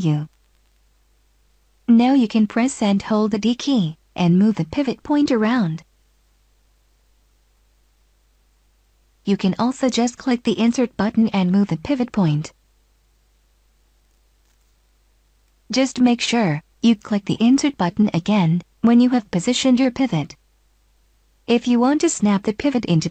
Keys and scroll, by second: 3.2 d, 10.8 Insert, 22.3 Insert.